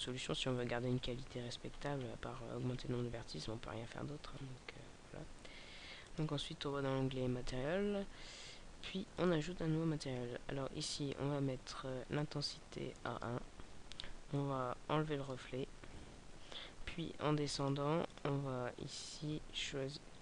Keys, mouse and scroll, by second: 1.3-1.7 scroll down 2, 1.7-2.4 scroll down 4, 2.5-4.3 scroll down 6, 4.3-5.9 scroll down 2, 5.9 click, 10.6 scroll down 1, 12.1 click, 15.7-17.5 scroll down 5, 17.5 click, 18.1 click.